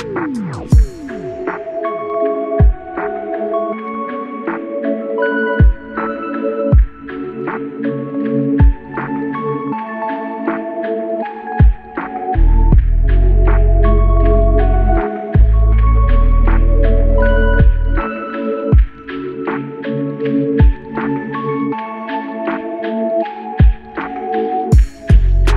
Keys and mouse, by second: 0.8 shift+click, 4.3-5.7 typing, 8.8 typing, 11.0 double click, 17.3-18.6 typing, 21.9 alt+click.